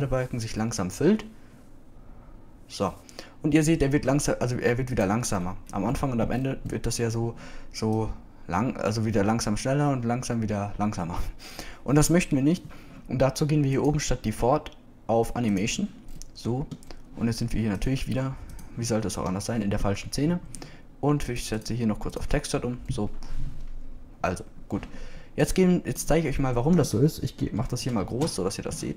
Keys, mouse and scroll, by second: 17.1-19.1 middle drag, 20.7 middle click, 21.3 KP_0, 22.3-23.4 drag.